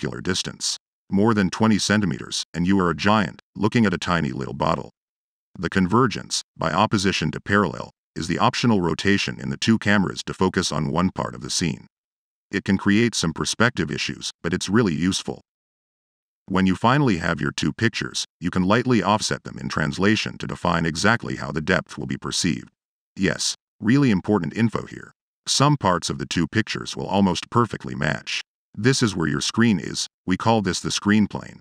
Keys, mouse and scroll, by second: 7.0-10.2 drag, 15.9 click, 16.3 click, 17.2 click, 17.7 middle click, 18.1 click, 28.8-31.6 middle drag.